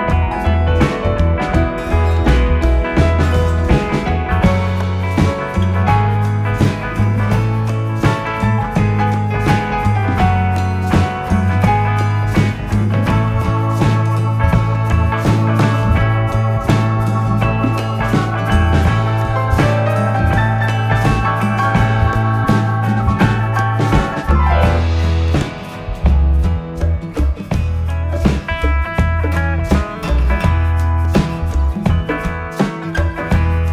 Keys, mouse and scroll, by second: 1.5 g, 5.6-9.8 drag, 9.8 r, 12.4 e, 16.1 e, 20.1 e, 23.2 ctrl+z, 24.3 ctrl+z, 24.8-27.9 middle drag, 29.6 ctrl+z, 31.1 e.